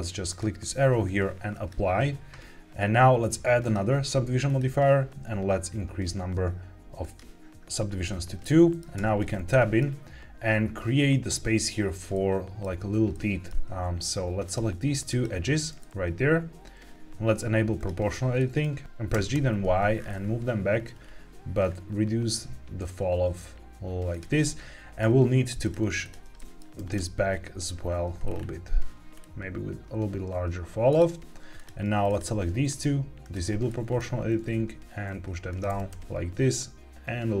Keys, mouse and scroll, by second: 0.2-1.6 drag, 3.5-4.5 drag, 6.9 click, 8.3 middle click, 8.9 Tab, 9.4 middle click, 12.0 middle click, 13.0 middle click, 14.4 click, 15.0 shift+click, 15.7-16.9 middle drag, 17.7 Escape, 17.7 click, 17.7 g, 18.3 middle click, 18.7 g, 18.8 Escape, 18.8 y, 19.0 g, 19.2 y, 19.8-21.4 scroll up 9, 21.6-22.0 scroll down 3, 24.0 click, 24.3 middle click, 25.5 click, 25.9 shift+click, 26.3 middle click, 26.7 g, 26.9 y, 28.1-28.9 scroll down 3, 28.9-29.3 scroll down 2, 30.8 click, 32.0 shift+click, 33.1 click, 33.6 middle click, 34.2 g, 34.3 z, 35.4 click, 35.6 g, 35.8 y.